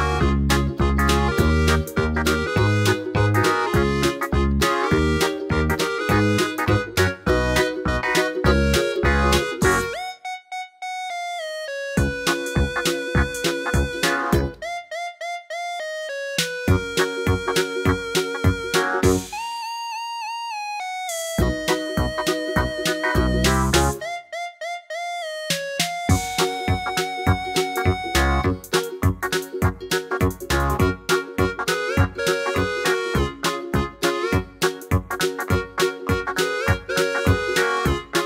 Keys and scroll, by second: 0.9 d, 10.9 super+z, 17.0-17.8 typing, 25.7 Page_Up, 25.9 Page_Up, 26.2 Page_Down, 32.7 2, 32.7 Return, 34.4 Page_Up, 36.2 Page_Up, 37.1 typing.